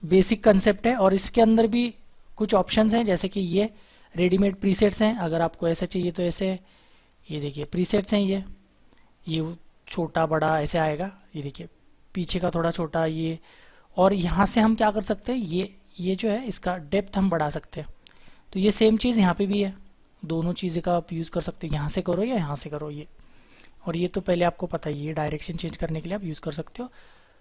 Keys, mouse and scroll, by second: 19.7 double click, 26.8-27.4 scroll down 1.